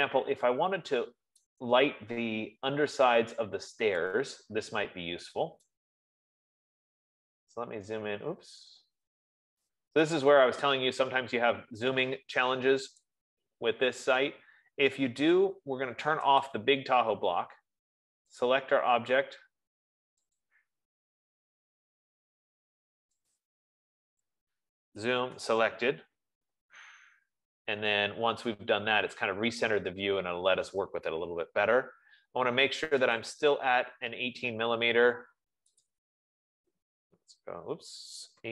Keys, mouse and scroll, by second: 2.3 right click, 2.4-3.6 scroll, 3.6-5.1 scroll, 6.4 right click, 6.7 scroll, 7.0 scroll up 10, 8.2 scroll, 9.1-10.1 scroll, 10.2-11.1 scroll down 2, 11.8 scroll down 1, 12.1-12.7 scroll, 13.5 click, 17.1 click, 18.8 click, 20.8 click, 23.8 click, 25.3 z, 25.6 s, 28.3-28.8 scroll, 29.5-30.1 scroll, 30.7 scroll, 31.5 Escape, 32.7 Escape, 33.6 click, 36.3 click, 37.3-38.5 typing.